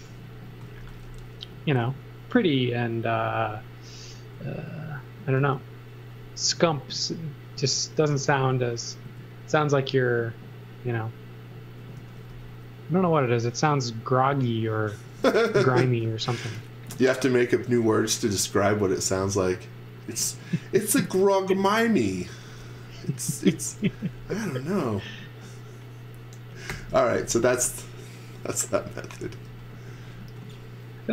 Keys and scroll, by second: 0.4 x, 0.8 v, 6.4-9.0 typing, 12.0 x, 12.3 v, 15.8 z, 17.6 x, 18.9 x, 22.3-25.3 typing, 26.4-28.0 typing, 29.2 x, 30.2 v.